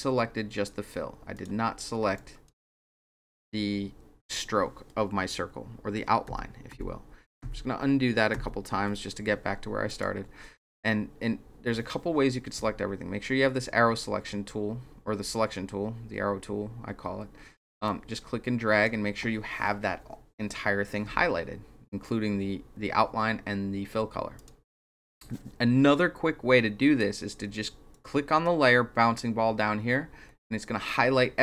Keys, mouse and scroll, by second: 1.3 click, 2.1 click, 6.8 ctrl+z, 7.4 ctrl+z, 8.4 ctrl+z, 9.8 click, 10.6 click, 17.8 click, 24.3 click, 27.9 click.